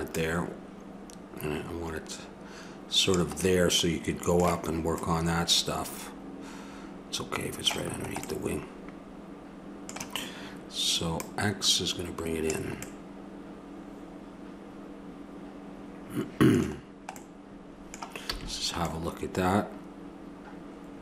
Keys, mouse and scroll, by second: 0.1-2.0 drag, 3.4-6.2 middle drag, 7.9-9.0 middle drag, 11.2-13.1 drag, 13.1-14.7 middle drag, 16.8-17.8 middle drag, 18.3 a.